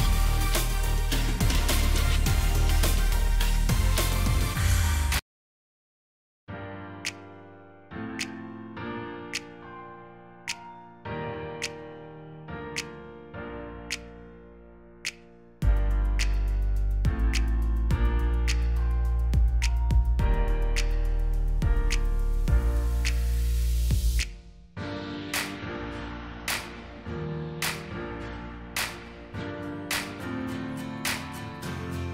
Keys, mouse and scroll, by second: 0.9 double click, 2.8 Delete, 4.9 right click, 6.0 double click, 8.9 shift+click, 16.4 double click, 17.8 typing, 22.6-23.4 typing, 25.7 click, 26.9 right click, 28.7 double click, 29.0 right click, 30.1 double click.